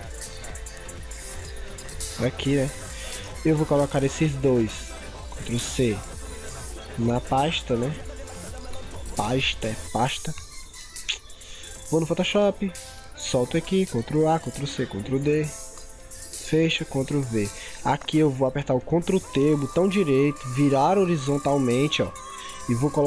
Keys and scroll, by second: 5.5 ctrl+c, 8.0 ctrl+v, 14.4 ctrl+c, 14.7 ctrl+d, 17.0 ctrl+v, 19.1 ctrl+t.